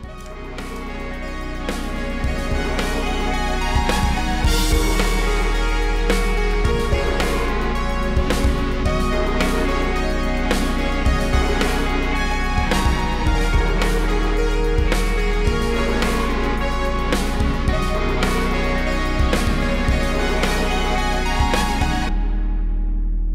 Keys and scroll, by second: 1.0 super+c, 1.5 super+v, 3.4 p, 5.4 v, 6.2 5, 6.6 Return, 6.9 v, 8.3 super+z, 8.7 shift+super+], 10.6-12.8 typing, 12.9 super+v, 17.1-19.8 typing, 19.9 super+c, 20.0 super+v, 21.9-22.9 typing.